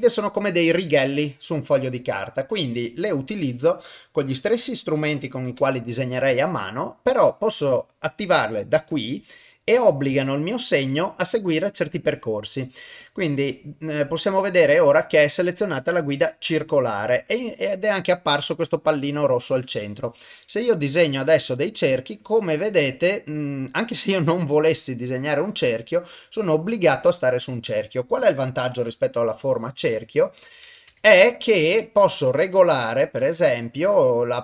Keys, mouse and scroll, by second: 4.2-5.4 drag, 8.8 click, 13.0-17.2 drag, 17.3 click, 19.1 click, 20.0 click, 21.0 click, 22.1 click, 24.1-25.8 drag, 30.4 click, 31.9-34.4 drag.